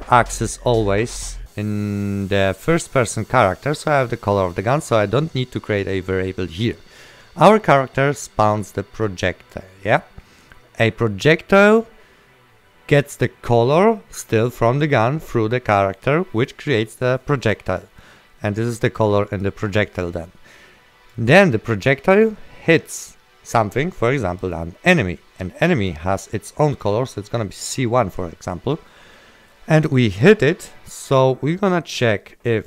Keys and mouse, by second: 2.2 click, 8.7 click, 19.3 click.